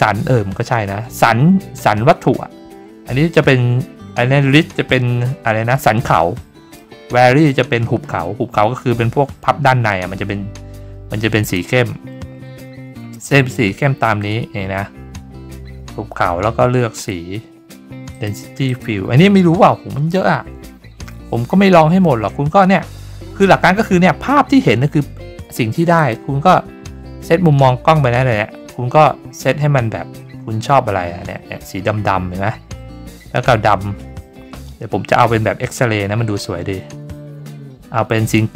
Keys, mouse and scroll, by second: 11.4 click, 18.1 click, 18.6 click, 25.9 click, 27.2-28.3 scroll up 8, 30.1-33.5 drag, 35.0 click, 38.2 click.